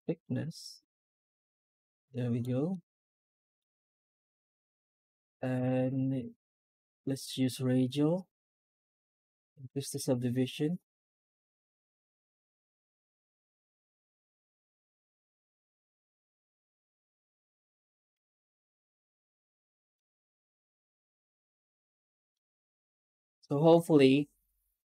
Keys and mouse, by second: 2.6-3.4 middle drag, 4.0 alt+shift+z, 4.1-5.1 middle drag, 5.4 F9, 19.8-22.2 middle drag, 22.6 F9.